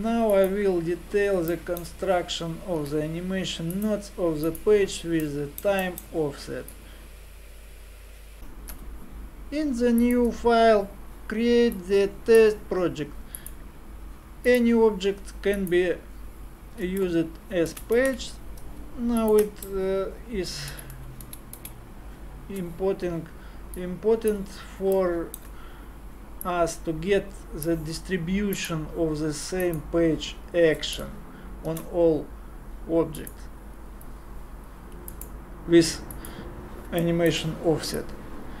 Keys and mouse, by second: 0.3 click, 2.8 t, 5.3 middle click, 6.7-8.1 drag, 11.8-15.5 drag, 17.7 shift+d, 20.7 shift+r, 21.2 shift+r, 21.6 shift+r, 23.8-25.0 drag, 26.6 middle click, 26.9 click, 27.1 click, 27.5 click, 27.6 click, 33.3 shift+a, 38.1 click.